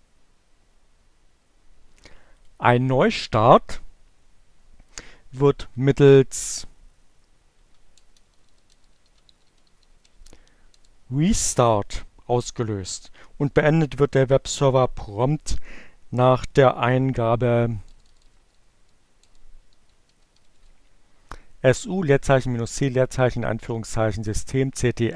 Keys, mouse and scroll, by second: 2.0 click, 4.9 Up, 5.3 Left, 7.3-9.9 typing, 15.3 BackSpace, 18.8-20.4 typing.